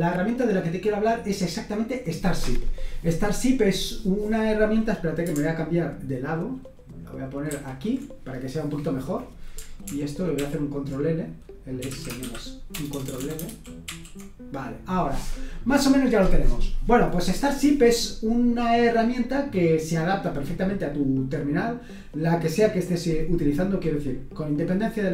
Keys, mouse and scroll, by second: 0.2 click, 7.5 super+h, 9.8 super+l, 10.3 super+l, 11.5-13.0 typing, 13.4 ctrl+l, 13.8 ctrl+l.